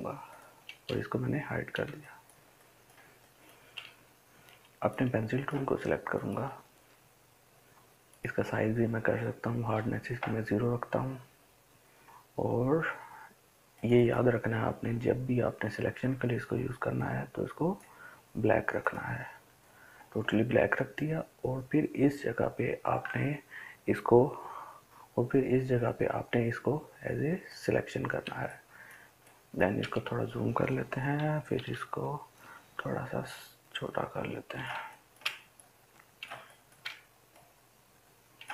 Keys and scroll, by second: 31.2-31.9 typing.